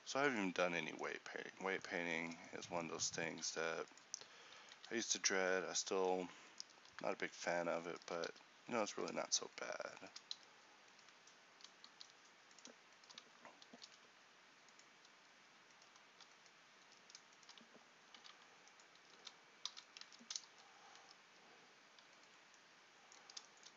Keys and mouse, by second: 0.0 x, 3.3 right click, 3.7 x, 4.8 x, 10.4 f, 11.7 g, 13.9 alt+m, 16.9 z, 18.3 alt+m, 19.2 z, 19.3 z, 20.1 Tab, 21.1 Tab.